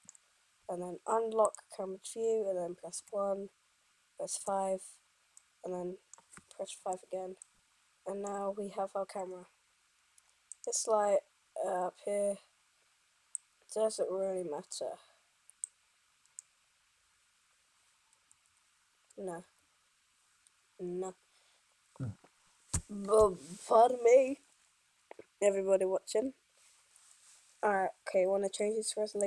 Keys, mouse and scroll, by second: 1.6-4.5 middle drag, 3.0 KP_1, 4.5 KP_5, 10.7-16.6 right drag, 16.6-18.5 drag, 18.5 n, 19.5 o.